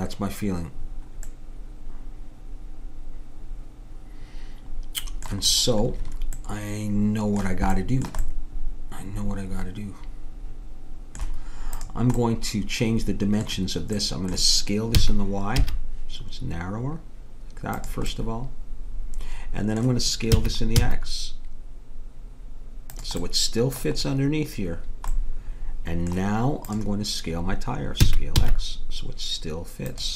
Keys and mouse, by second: 6.5 middle click, 11.9 click, 15.0 s, 20.3 s, 23.3-26.8 middle drag, 26.8-30.0 drag, 28.1 s.